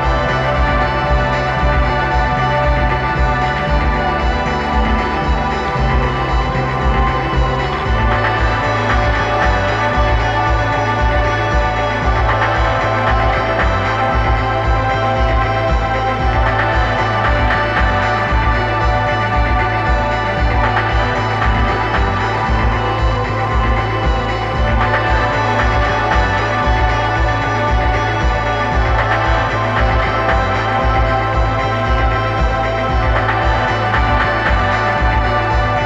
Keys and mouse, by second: 4.7-6.7 drag, 7.2-10.2 drag, 12.6-14.5 drag, 19.6 right click, 20.4 click, 22.4-24.2 drag, 25.4 click, 26.7 click, 27.2 click, 28.6 click, 30.0 click, 31.5 right click, 32.0 click, 33.5 click, 34.6 click.